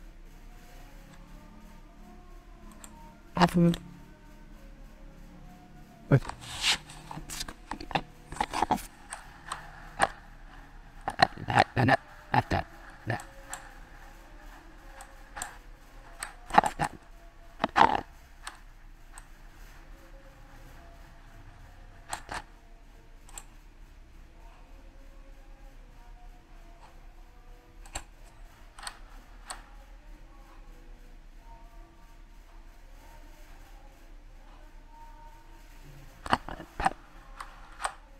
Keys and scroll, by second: 26.1 ctrl+z.